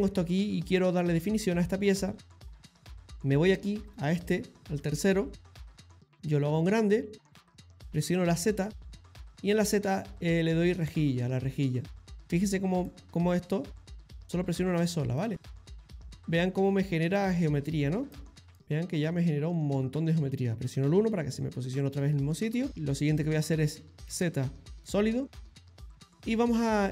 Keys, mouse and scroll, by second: 0.0 shift+middle click, 3.4 click, 6.7 click, 8.4 z, 12.9 click, 13.6 middle click, 14.8 click, 15.2 middle click, 16.1 click, 16.5 middle click, 17.2 click, 17.5 middle click, 17.6 middle click, 18.1 scroll up 1, 18.2 middle click, 18.6 middle click, 20.9 KP_1, 22.4 click, 24.1 z.